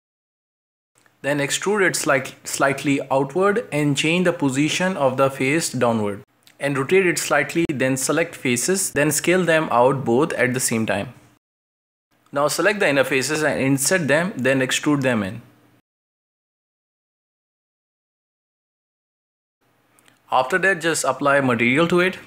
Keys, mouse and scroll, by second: 0.1-1.2 right drag, 1.2 shift+middle click, 1.4 scroll up 1, 3.2 KP_1, 3.8 scroll down 1, 3.9 shift+middle click, 4.1-4.6 scroll up 4, 4.4 shift+middle click, 4.8 g, 6.0 shift+middle click, 6.3 ctrl+r, 7.8 click, 8.1 right click, 8.2-8.8 scroll down 4, 8.3 middle click, 8.8 shift+middle click, 9.6 shift+right click, 9.8 middle click, 10.1-11.5 scroll up 1, 11.5 s, 12.2-14.5 middle drag, 14.5-14.8 scroll up 1, 14.8-16.5 right drag, 16.5 o, 16.8 o, 16.9 i, 19.9-20.8 scroll down 4, 20.2 middle drag, 20.5 middle drag, 20.8-21.3 middle drag, 21.3 right drag.